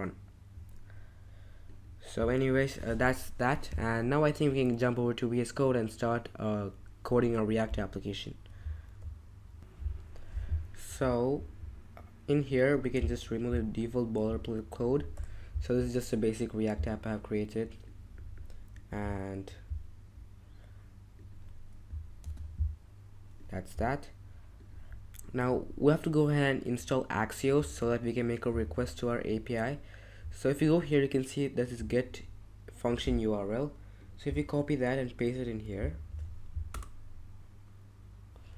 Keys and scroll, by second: 15.1 BackSpace, 18.9 BackSpace, 22.2 super+x, 27.6 ctrl+Tab, 28.6 super+Tab, 36.1 super+v.